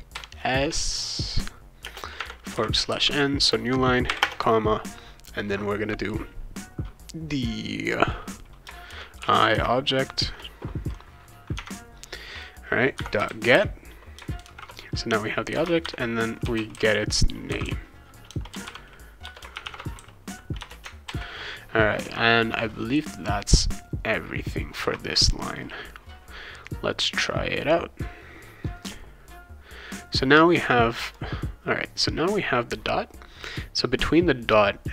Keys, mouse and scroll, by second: 0.1 s, 1.8 space, 2.1 \, 2.5 n, 4.1 ,, 4.2 space, 8.6-10.2 typing, 11.5 Tab, 12.7-20.6 typing, 19.2 Return, 21.1 ctrl+s, 31.1 click.